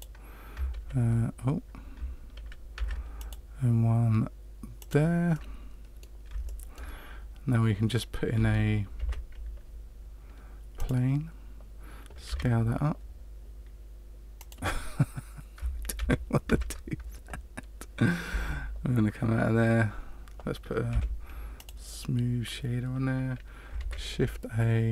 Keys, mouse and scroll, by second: 0.8 ctrl+f, 2.7 ctrl+r, 5.3 middle click, 6.4 shift+middle click, 8.9 shift+a, 12.2 s, 15.9 ctrl+z, 16.5 ctrl+z, 18.3 Tab, 20.9 w, 23.8 shift+a.